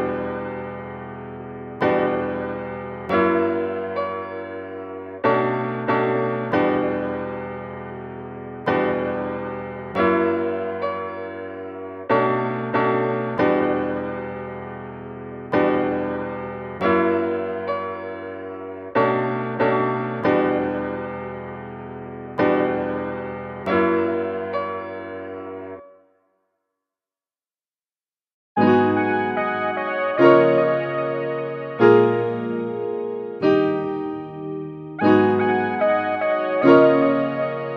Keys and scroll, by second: 15.3 super++.